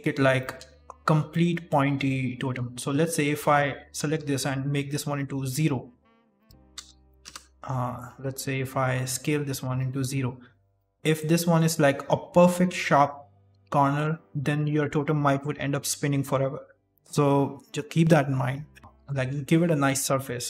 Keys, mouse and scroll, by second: 0.3 shift+middle click, 1.2 middle click, 1.6 shift+middle click, 1.8-2.2 scroll up 3, 2.2 middle click, 3.1 right click, 3.5 alt+right click, 4.1 s, 6.6 KP_0, 7.1 KP_Enter, 9.1 s, 10.4-10.8 scroll up 4, 10.8 KP_1, 13.1 scroll down 6, 13.7 shift+middle click, 19.0 ctrl+z, 19.9 ctrl+z.